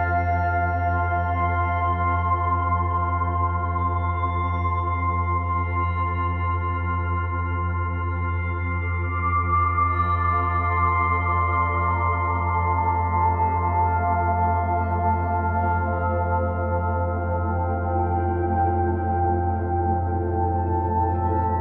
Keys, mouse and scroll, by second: 0.3-1.0 scroll up 4, 1.0 click, 1.2 b, 2.1 scroll up 2, 2.4 s, 3.5 s, 4.5 click, 4.7 r, 7.6 g, 10.1 shift+click, 10.4 s, 11.2 s, 13.2 scroll down 3, 13.5 s, 14.4 scroll down 6, 14.6 middle click, 15.1 scroll up 2, 15.2 s, 16.1-16.6 scroll up 2, 16.6 ctrl+s, 18.0 click, 18.4 b, 19.1 o.